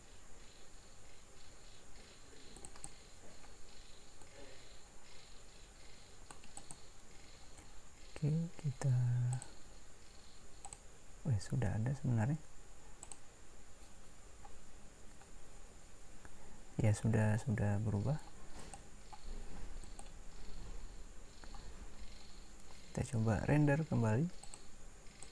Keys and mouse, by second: 4.4 right click.